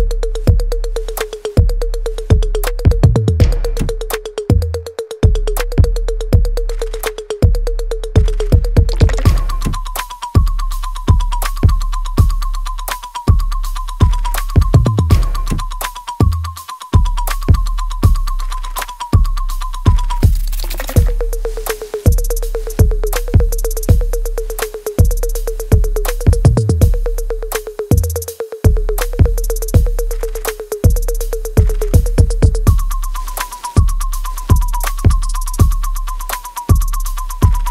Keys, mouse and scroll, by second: 1.9 click, 2.4 alt+right click, 3.1 alt+click, 3.7-7.5 alt+middle drag, 7.5 alt+right click, 8.1 alt+click, 8.6-10.7 alt+middle drag, 10.7 click, 15.6 click, 15.8 alt+right click, 16.4 alt+click, 17.4 alt+middle click, 18.0-19.8 alt+right drag, 19.8-21.4 alt+middle drag, 21.4 alt+middle click, 22.0 alt+right click, 22.4 alt+click, 23.0 alt+middle click, 23.0 alt+middle click, 23.7 alt+click, 24.9 alt+middle click, 25.6 alt+click, 26.5 alt+middle click, 26.9 alt+click, 27.7 alt+middle click, 28.1 alt+right click, 29.3-30.7 alt+middle drag, 30.7-33.4 drag, 36.2 click.